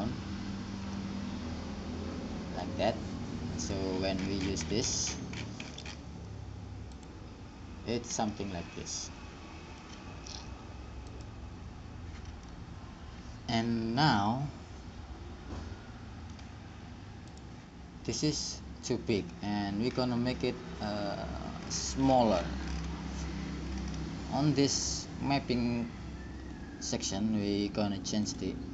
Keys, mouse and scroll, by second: 3.9-5.7 drag, 7.4-9.4 drag, 9.4 middle click, 11.7-13.3 drag, 13.3-15.1 middle drag, 18.0-19.5 drag, 21.8-26.3 middle drag, 28.5-28.7 drag.